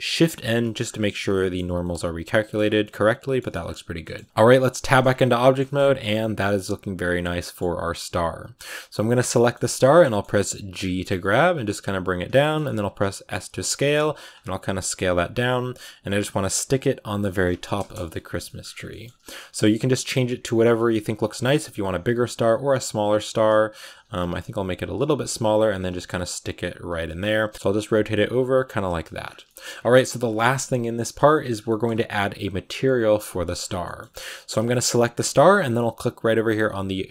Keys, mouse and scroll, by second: 0.0 shift+n, 0.5 middle click, 0.6 scroll up 4, 1.0 middle click, 1.5 a, 1.7 middle click, 2.5 scroll down 3, 2.7 middle click, 3.3 Tab, 3.4 scroll up 4, 3.9 middle click, 4.1 scroll up 2, 4.1 Tab, 4.2 scroll down 3, 4.5 middle click, 4.7 Tab, 4.9 scroll down 4, 5.1 a, 5.3 middle click, 5.5 ctrl+s, 5.6-6.0 scroll down 7, 6.0-8.9 middle drag, 8.9 right click, 9.1 middle click, 9.7 scroll up 1, 9.9 middle click, 10.5 g, 12.3 shift+middle click, 12.4 shift+scroll up 3, 12.7 s, 13.6 middle click, 14.0 s, 14.3 g, 15.3 middle click, 15.8 g, 16.4 r, 16.8 g, 17.7 KP_0, 18.3 shift+middle click, 18.5-19.2 scroll up 8, 18.7 shift+middle click, 19.2 s, 20.0 g, 20.7 r, 21.2 scroll down 4, 21.3 s, 23.1 s, 23.6 scroll up 4, 23.8 g, 25.1 g, 25.8 a, 25.9 scroll down 3, 26.6 Right, 26.8 r, 27.7 r, 28.3 g, 28.8 a, 29.1-29.8 scroll down 4, 29.3 shift+middle click, 29.8-31.4 shift+middle drag, 31.4-31.9 scroll up 4, 31.5 shift+middle click, 33.2 right click, 33.4 scroll down 4, 33.7 shift+middle click, 34.0-34.6 scroll up 5, 34.6-37.1 shift+middle drag.